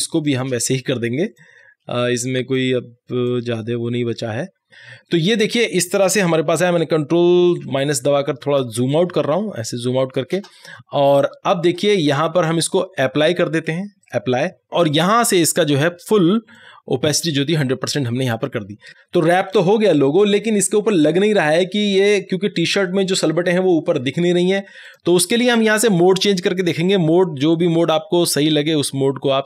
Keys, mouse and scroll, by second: 4.0 alt+scroll down 1, 4.7-6.5 drag, 6.7 click, 7.7 ctrl+-, 8.6 space, 8.9 click, 9.1 space, 14.1 space, 14.1 click, 15.5-18.9 drag, 24.9 click, 24.9 click.